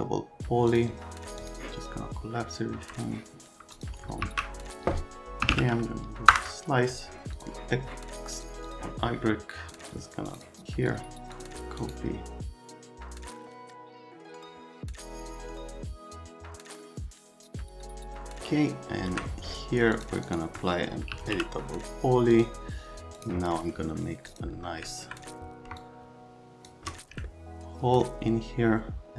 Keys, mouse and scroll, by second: 0.0-0.2 typing, 0.7 click, 1.4 click, 2.4 middle click, 3.7 click, 4.2-6.0 typing, 6.3 Return, 7.3 click, 8.4 click, 8.6 click, 9.1 middle click, 9.7 click, 9.9 middle click, 10.3 scroll, 10.9 middle click, 11.4 middle click, 11.8 scroll, 12.5 middle click, 12.8 middle click, 13.1 middle click, 13.5 middle click, 13.8 middle click, 14.4 click, 14.9-15.4 scroll, 15.0 click, 15.6 click, 16.0 scroll, 16.1 click, 16.7 click, 16.8-17.1 scroll, 17.3 click, 17.6 scroll, 17.9 click, 18.1 click, 18.4 alt+middle click, 20.0 click, 20.2 click, 20.9-21.7 typing, 22.3 click, 23.2 click, 23.6 right click, 24.3 click, 24.9 alt+click, 25.8 shift+middle click, 27.3 alt+click.